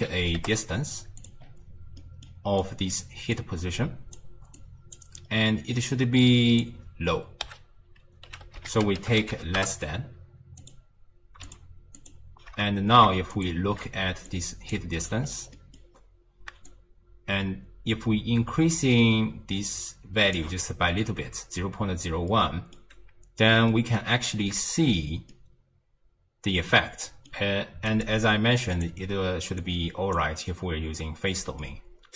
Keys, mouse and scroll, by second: 1.5-2.0 scroll up 2, 2.0-2.6 middle drag, 2.6 click, 3.4 click, 4.6 click, 5.2 scroll down 1, 5.5-6.2 middle drag, 6.2 click, 8.6 s, 11.5 ctrl+click, 12.0 ctrl+shift+click, 13.4 ctrl+shift+click, 14.3 click, 15.2-15.6 scroll up 3, 15.6-16.7 middle drag, 16.7-19.7 shift+drag, 22.3-23.0 middle drag, 23.0 scroll down 1, 23.7 middle click, 24.2 alt+z, 25.0-25.3 scroll up 1, 25.3-26.2 middle drag, 27.1-27.9 middle drag, 27.9-29.8 drag, 31.6-32.1 middle drag.